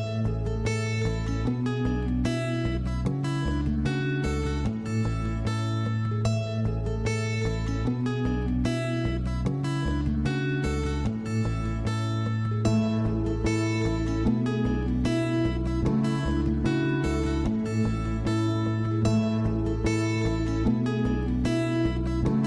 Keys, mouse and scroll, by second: 0.5-0.9 scroll up 4, 0.9-3.9 middle drag, 3.9-4.8 drag, 5.3-8.3 middle drag, 8.3-9.2 drag, 9.3-10.2 drag, 11.5 click, 12.8-13.1 scroll down 2, 13.1-15.2 middle drag, 15.2 drag, 16.4 shift+a, 20.5-22.4 drag.